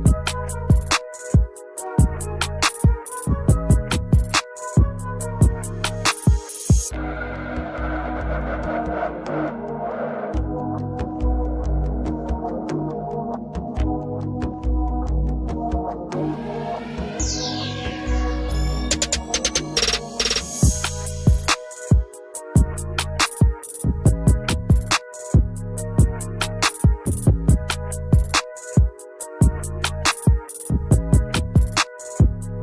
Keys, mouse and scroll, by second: 7.7 double click, 9.0 double click, 12.0 alt+double click, 12.1 alt+click, 14.0 double click, 14.5 alt+click, 15.5 alt+click, 19.0 scroll down 1, 22.5 double click, 28.5 double click, 30.9 double click, 32.1 double click.